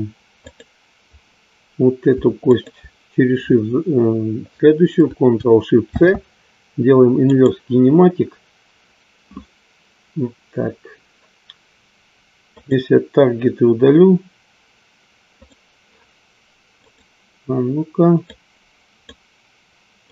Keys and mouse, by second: 0.8-1.6 drag, 12.6 click, 15.3 click, 16.8-18.1 drag, 18.2-19.2 drag.